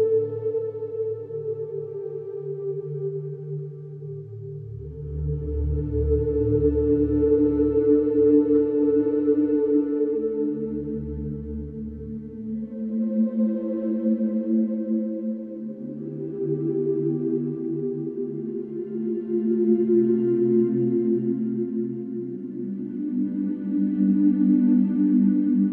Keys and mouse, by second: 1.5 shift+d, 1.7 Escape, 19.2 shift+d, 19.4 Escape, 20.7 ctrl+z, 23.5 shift+a.